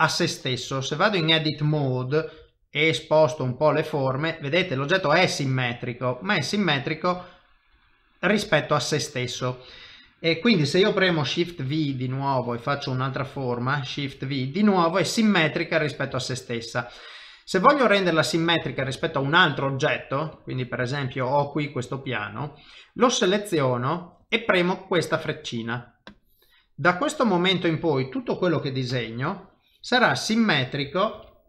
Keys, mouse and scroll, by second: 0.7 Tab, 7.1 middle click, 7.8 Tab, 8.1 middle click, 11.9 click, 13.5 shift+v, 14.1 middle click, 16.1 shift+middle click, 18.0 middle click, 18.9 shift+middle click, 20.3 click, 26.1 click, 27.6 middle click, 28.9 shift+v, 29.2 click, 31.2 shift+v.